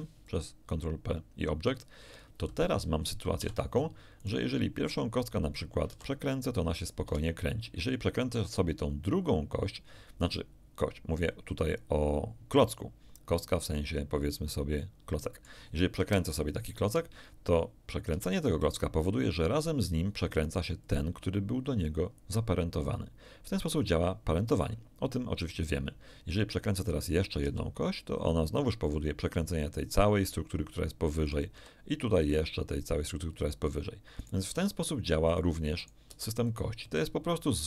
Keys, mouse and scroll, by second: 0.2 ctrl+click, 3.4 z, 4.2 right click, 5.8 r, 7.0 Escape, 8.4 right click, 13.7-15.6 middle drag, 16.0 KP_1, 18.0 r, 20.8 click, 26.8 right click, 27.4 r, 28.9 click, 31.2 right click, 31.5 r, 32.2 click, 34.2 right click, 34.5 r, 35.2 click, 35.8 right click, 36.0 r, 36.4 click.